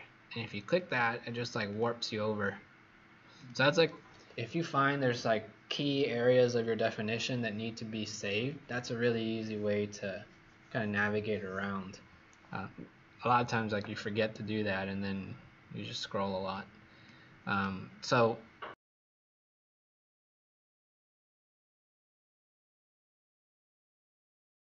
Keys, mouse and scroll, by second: 14.2 scroll down 3, 15.2-16.2 scroll up 4, 16.4 click, 19.1-19.6 scroll down 1, 20.7 scroll down 1, 21.2 scroll up 2.